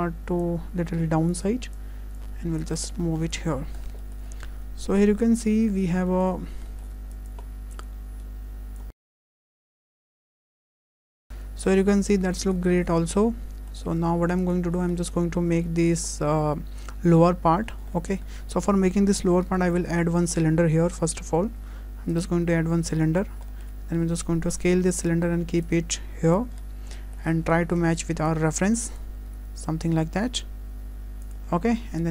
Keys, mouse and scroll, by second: 0.0 click, 0.4 click, 1.8 click, 3.3 click, 3.6-3.9 scroll down 7, 4.0 shift+middle click, 4.4-5.2 scroll down 2, 4.5 Tab, 5.2-6.6 scroll up 6, 5.3 Tab, 6.1 shift+middle click, 6.7 shift+middle click, 7.1 click, 7.7 click, 8.9 click, 9.0 click, 9.2 click, 9.5 click, 9.6 scroll down 3, 9.6 shift+middle click, 9.8 shift+middle click, 10.0 click, 10.5 click, 10.6 click, 10.7 click, 11.0 click, 11.1 click, 11.1 scroll down 4, 11.3 Tab, 11.3 shift+middle click, 11.3-11.7 scroll up 2, 11.3 `, 11.7 Tab, 11.7 middle click, 12.3 scroll down 3, 12.6 shift+middle click, 13.0 middle click, 14.0 `, 15.0 shift+middle click, 15.4 scroll down 1, 15.7 shift+middle click, 17.7 scroll up 2, 18.0 shift+middle click, 18.3 scroll down 2, 18.5 shift+middle click, 19.4 shift+a, 23.0-23.5 scroll down 6, 23.5 shift+middle click, 23.9 s, 25.7 click, 26.5-27.0 scroll up 5, 27.0 shift+middle click, 27.9-28.3 scroll up 1, 28.3 click, 29.3 s, 32.0 click.